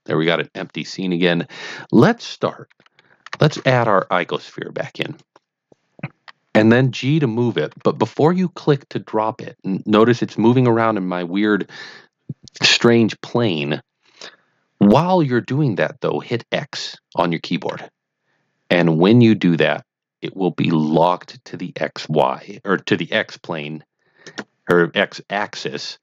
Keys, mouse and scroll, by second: 3.4 shift+a, 5.0 click, 7.0 click, 7.7 g, 17.8 x, 24.3 click.